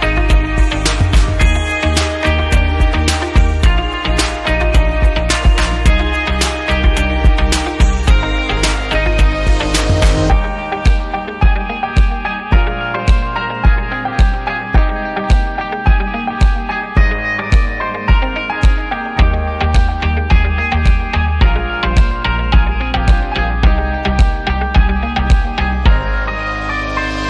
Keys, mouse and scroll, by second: 1.2 shift+click, 3.2 click, 4.4 click, 5.2 click, 6.3 click, 7.5 click, 9.0 click, 10.1 click, 12.3 click, 13.2 click, 13.8 click, 14.7 click, 16.2 ctrl+click, 17.3 click, 18.1 click, 18.8 click, 21.2 click, 22.6 click, 23.9 click, 25.6 click, 26.2 click.